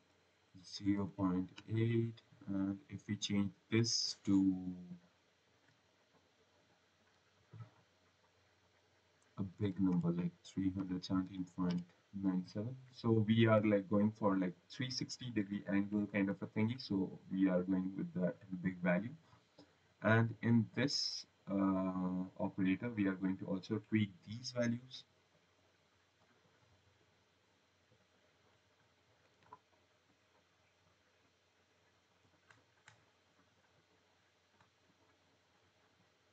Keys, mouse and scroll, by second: 1.1-1.9 typing, 5.4 click, 6.5 click, 9.5-11.6 typing, 14.2-15.0 scroll, 19.0 click, 19.5 right click, 20.1-20.6 scroll, 20.6 click, 21.3-22.1 scroll, 22.3-22.7 scroll.